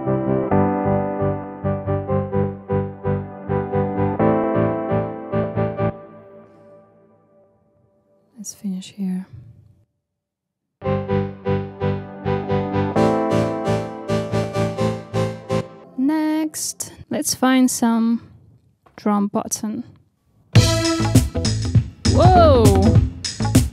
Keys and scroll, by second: 5.8 space.